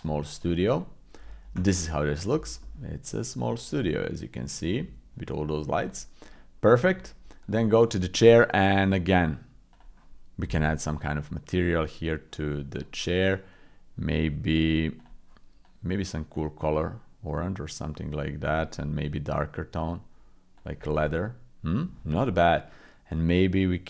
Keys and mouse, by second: 1.7 middle click, 2.6 middle click, 3.3 middle click, 4.1 middle click, 4.3-6.6 drag, 9.3 click, 12.9 click.